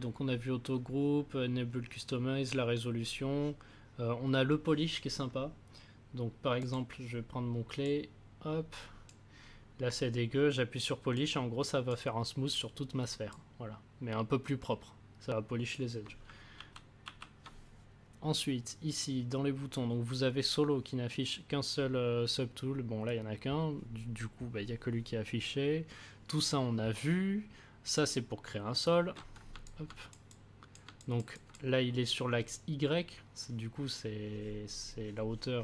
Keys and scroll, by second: 16.5 ctrl+z.